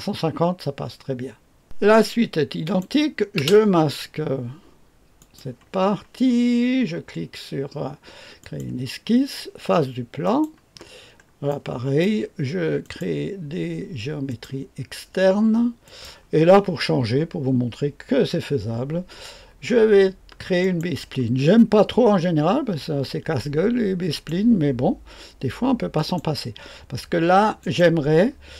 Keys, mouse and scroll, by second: 1.6 click, 2.6 click, 3.3 space, 5.2 click, 8.4 click, 10.2 click, 10.7 click, 11.0-12.0 scroll up 2, 12.0 click, 12.8 click, 12.8 right click, 14.3 click, 15.8 click, 20.6 click, 24.1 click, 25.9 click, 27.6 click.